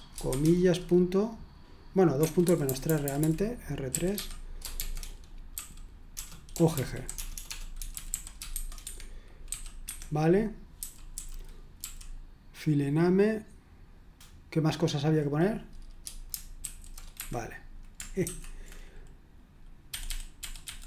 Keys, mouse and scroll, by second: 0.0-0.3 typing, 2.2 Escape, 2.4-9.5 typing, 9.8 Escape, 16.6 ctrl+v, 17.2 Escape, 18.2 space, 19.9-20.8 typing.